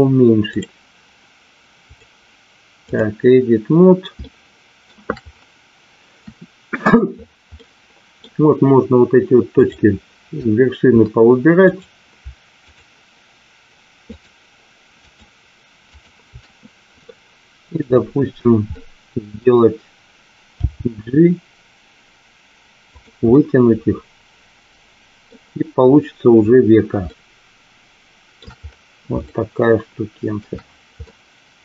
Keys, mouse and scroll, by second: 1.9-3.3 drag, 4.2 shift+middle click, 7.6 middle click, 9.4 click, 11.6 click, 12.6 shift+click, 14.0 shift+click, 15.0 shift+click, 15.8 shift+click, 17.0 middle click, 18.7 middle click, 20.7 g, 22.8 click, 23.4-25.2 middle drag, 27.1-28.3 shift+middle drag, 29.2-30.4 shift+middle drag, 31.1 middle click.